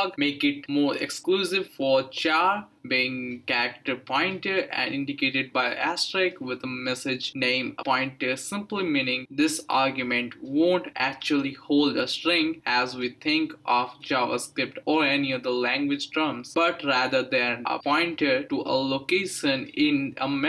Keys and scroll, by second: 0.0-5.1 typing, 6.1-7.7 typing, 9.7 space, 12.3 Right, 13.0-14.5 typing.